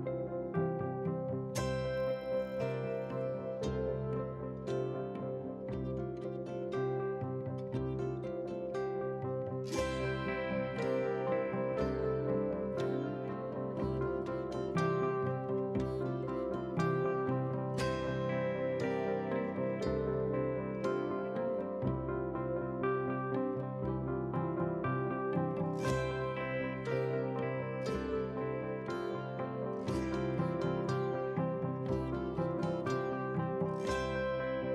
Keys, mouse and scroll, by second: 0.1 shift+click, 0.3 shift+click, 0.5 shift+click, 1.0 KP_3, 1.5 shift+d, 3.9 drag, 4.4 KP_1, 4.8 shift+d, 5.8 shift+d, 6.8 scroll down 2, 6.9 shift+middle drag, 7.3 shift+d, 8.6 shift+d, 9.3-9.6 scroll down 1, 9.6 middle drag, 10.1 click, 10.4 KP_7, 10.7 g, 11.5 g, 13.2 middle drag, 13.6 KP_1, 14.6-15.6 drag, 16.5 click, 16.9 click, 18.2 click, 18.5 g, 20.0 KP_1, 20.3-21.0 scroll up 4, 20.6 shift+middle click, 21.2 s, 24.5 ctrl+z, 24.9 drag, 25.5 a, 25.8 g, 28.3 KP_3, 28.6-28.9 scroll down 4, 29.0 shift+middle click, 29.3 shift+middle click, 29.5-30.7 scroll up 6, 30.7-31.0 scroll up 4, 31.0 shift+middle drag, 31.3 g, 32.8-33.3 scroll down 2, 33.3 click, 33.9 click.